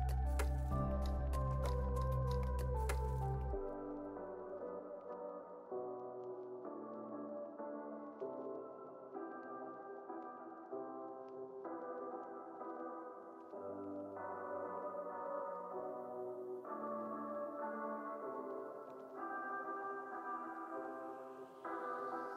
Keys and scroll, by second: 0.7 super+c, 1.0 super+v, 1.6 x, 2.6 super+c, 2.8 super+v, 4.2 super+c, 4.4 super+v, 4.9 super+s, 10.6 u, 17.7 super+c, 20.5 super+v.